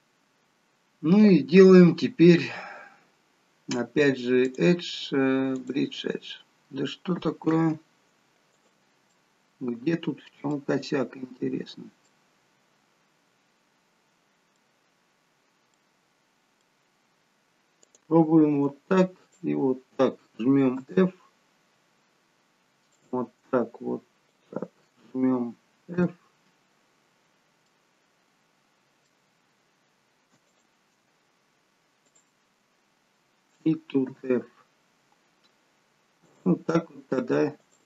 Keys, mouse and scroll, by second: 4.5 click, 7.4 ctrl+z, 8.5 click, 9.1 middle click, 10.7-11.3 scroll up 5, 12.1 middle click, 12.1 scroll up 1, 14.8 scroll down 1, 15.8 middle click, 17.0-17.8 scroll down 1, 17.8 click, 19.2 shift+click, 20.8 f, 21.8-22.9 scroll down 2, 22.9 click, 24.3 shift+click, 25.9 f, 27.7 middle click, 30.5 click, 32.1 shift+click, 34.1 f, 36.2 click, 37.6 shift+click.